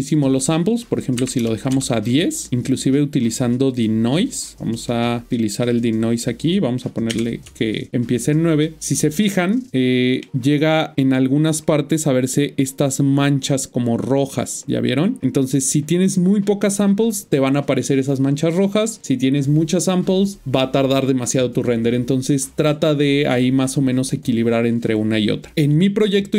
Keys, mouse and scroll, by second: 1.1 click, 1.6 Return, 1.6 o, 3.6 click, 7.0 typing, 7.4 Return, 9.7 middle click, 13.8-14.1 scroll up 1, 25.5 click.